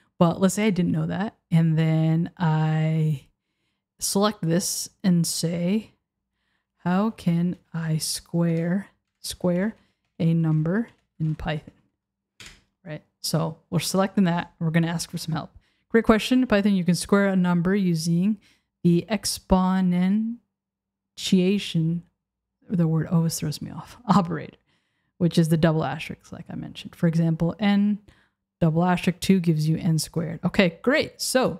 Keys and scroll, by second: 8.5 BackSpace, 12.5 Return.